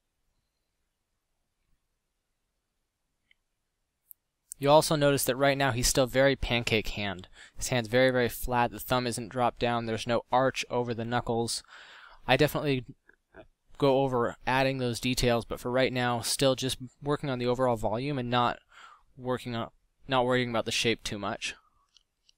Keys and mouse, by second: 2.7 f.